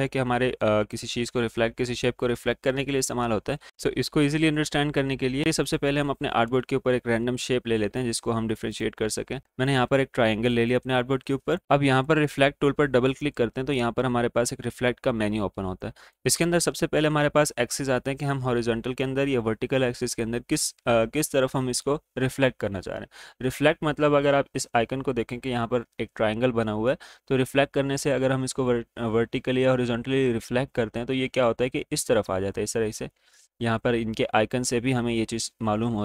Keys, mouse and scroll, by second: 0.9 click, 4.5 right click, 5.6-8.3 drag, 8.3 click, 9.4 space, 9.5-15.8 drag, 15.8-36.0 drag.